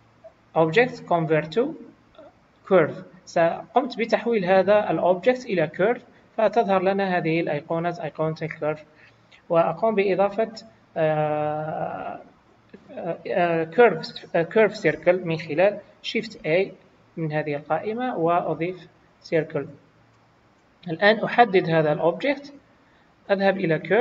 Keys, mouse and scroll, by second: 5.8 typing, 16.3 shift+a, 19.1 scroll down 2, 20.9 click, 20.9 scroll down 2, 23.6 click.